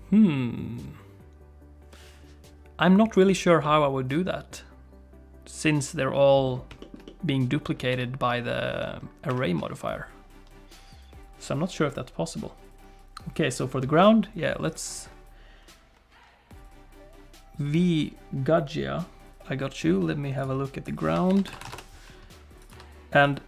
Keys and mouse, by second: 3.1 click, 3.6-6.1 middle drag, 6.8 shift+middle click, 7.0 middle click, 7.9 g, 14.6 click, 20.5-22.2 drag, 22.6 click, 23.2 click.